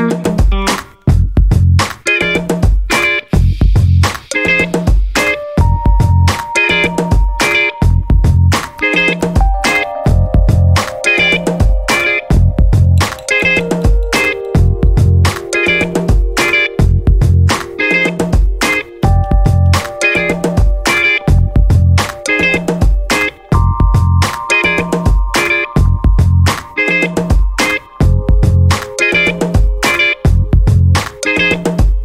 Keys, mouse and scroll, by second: 1.1-2.6 drag, 3.2 click, 3.6 click, 4.6 0, 6.1 click, 6.4 click, 7.9-10.7 drag, 11.5 click, 12.1-13.5 drag, 14.3 click, 14.9 click, 15.3 click, 15.7 click, 17.2-20.1 drag, 20.7 click, 21.0 click, 21.4-26.5 drag, 26.7-28.0 drag, 28.4 0, 28.9 scroll down 1, 31.0-32.0 drag.